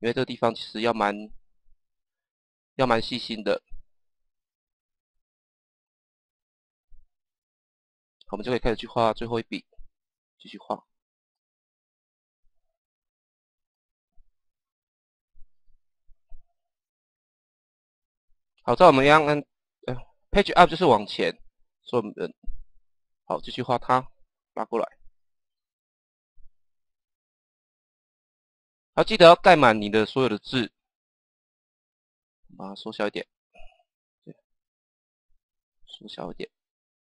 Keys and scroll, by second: 2.2 Page_Down, 4.4 Page_Down, 8.7 Page_Down, 15.9 Page_Down, 18.6 Page_Down, 20.8 Page_Up, 23.2 Page_Down, 31.7 Page_Down, 34.7 Page_Down.